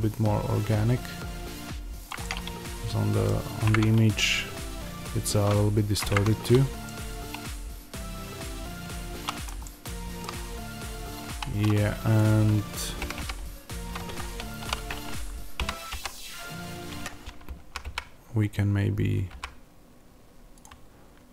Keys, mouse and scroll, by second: 2.0 click, 2.1-3.6 middle drag, 6.0-12.1 middle drag, 10.4-11.2 scroll up 2, 11.2 1, 12.1 click, 13.0 g, 14.1 Escape, 14.5 o, 16.9 Escape, 17.5 g, 20.5 click.